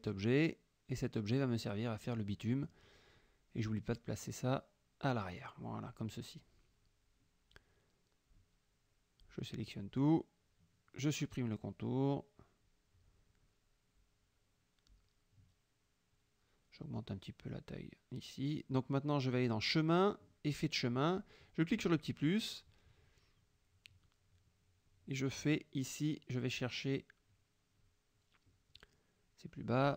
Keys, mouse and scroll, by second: 0.5-1.5 drag, 2.5 F7, 3.0 click, 3.6 F1, 5.6 click, 6.7 click, 7.6-8.6 drag, 9.2-10.2 drag, 12.5 shift+click, 13.2 shift+click, 13.6 shift+click, 16.5 click, 17.3 click, 18.5 click, 20.1 click, 21.1 click, 22.3 click, 23.6 click, 26.9-28.3 drag, 28.8 click.